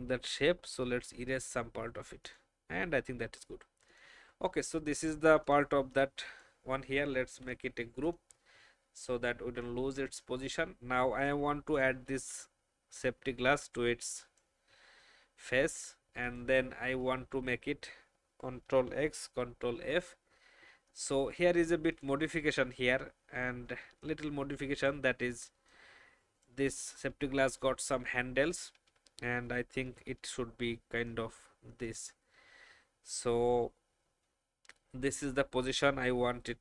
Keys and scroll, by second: 2.0 alt+v, 7.3 ctrl+g, 18.9 ctrl+x, 29.3 shift+Up.